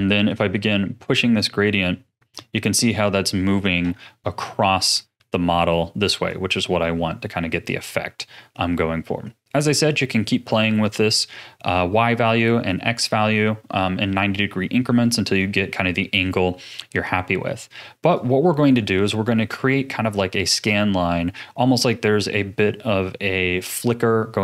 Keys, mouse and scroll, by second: 0.7-3.7 drag, 4.5-6.2 middle drag, 6.2-9.3 drag, 9.9-12.9 middle drag, 13.8-16.9 middle drag, 16.9-17.4 scroll up 3, 17.4 middle click, 18.1 click, 19.0-22.1 middle drag.